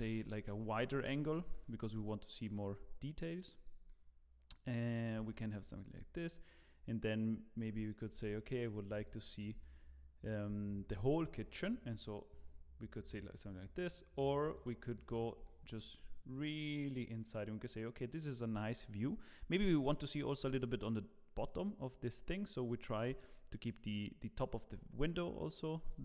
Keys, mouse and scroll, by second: 1.4 g, 3.8 middle click, 5.0 scroll up 1, 5.3 shift+middle click, 6.1-6.6 scroll down 1, 6.6 middle click, 8.3 shift+middle click, 9.0 middle click, 9.6 shift+middle click, 12.4-13.6 scroll up 3, 13.6 scroll up 2, 13.7 middle click, 14.5 shift+middle click, 20.6 shift+middle click, 25.0 shift+middle click.